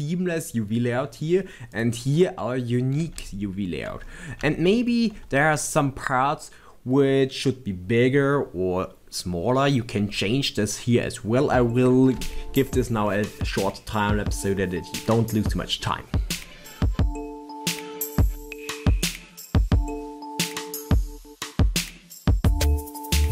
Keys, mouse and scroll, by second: 1.7 click, 2.5 scroll up 2, 3.3 shift+middle click, 4.0 scroll up 1, 4.6 shift+middle click, 12.0 click, 17.1 click, 17.6 click, 17.6 scroll up 1, 17.7 shift+middle click, 17.8 middle click, 18.0 Tab, 18.2 click, 18.6 middle click, 19.4 shift+click, 19.6 scroll down 1, 20.2 click, 20.2 scroll up 1, 20.4 shift+middle click, 20.8 middle click, 21.2 shift+click, 21.6 scroll down 2, 21.8 shift+middle click, 22.2 scroll down 2, 22.8 scroll up 2, 23.2 shift+middle click.